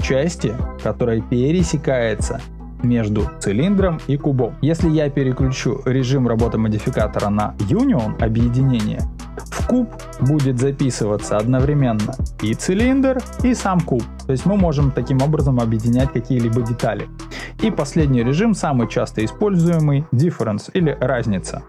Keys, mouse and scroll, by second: 7.6 click, 21.0 click.